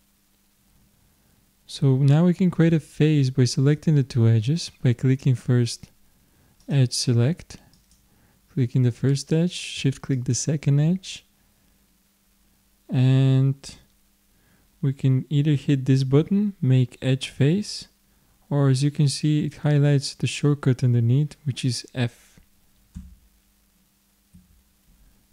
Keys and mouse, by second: 6.7-9.6 drag, 10.1-12.0 drag, 23.0 f, 24.4 f.